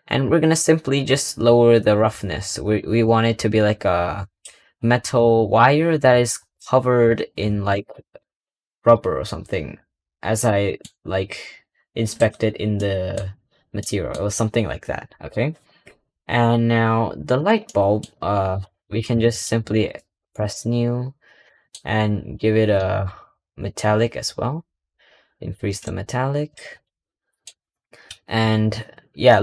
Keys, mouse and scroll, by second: 1.8-4.9 drag, 5.2-5.7 scroll down 5, 5.7-8.8 scroll up 2, 10.2 scroll up 1, 10.3-12.0 middle drag, 12.0 click, 12.4 scroll down 1, 12.6-17.2 middle drag, 17.2 click, 17.5 middle click, 17.9-18.5 scroll up 3, 18.5-20.2 middle drag, 20.2-20.8 drag, 20.8-21.3 scroll up 2, 21.3-23.0 middle drag, 23.0-25.0 scroll down 5, 25.0-25.7 scroll down 1, 25.7-26.7 drag, 26.7-27.9 middle drag, 27.9 KP_Decimal, 28.5-29.4 scroll up 2.